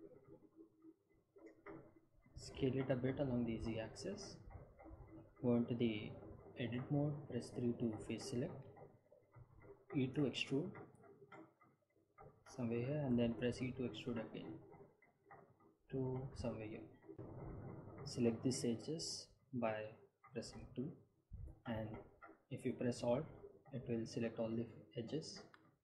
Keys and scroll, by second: 4.6 s, 4.8 z, 6.6 Tab, 8.8 3, 11.3 e, 14.7 e, 17.1 Tab, 20.1 2.